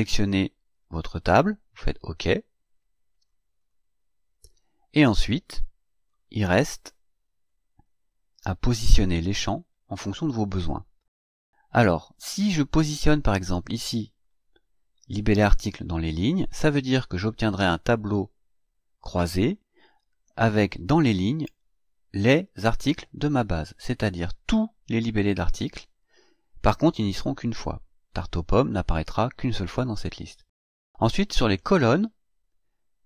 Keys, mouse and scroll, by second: 2.7 click, 3.5 click, 5.1-6.2 drag, 7.4 click, 13.0-15.4 drag.